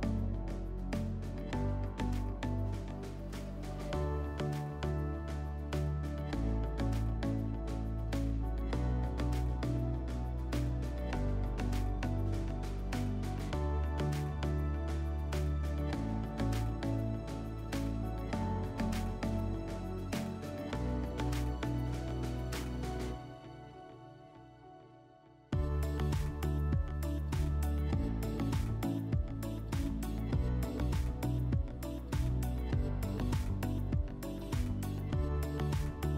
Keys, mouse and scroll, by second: 0.1-1.8 drag, 3.2-4.7 drag, 8.6-10.1 drag, 10.3-11.9 drag, 12.0 click, 13.3 click, 14.8-15.2 drag, 16.1 click, 18.4 click, 19.4 click, 22.0 click.